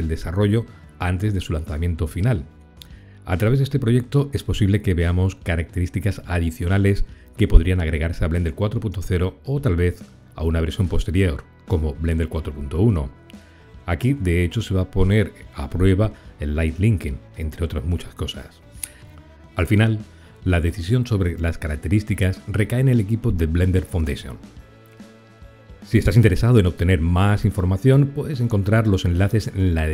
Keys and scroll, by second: 19.9 ctrl+l.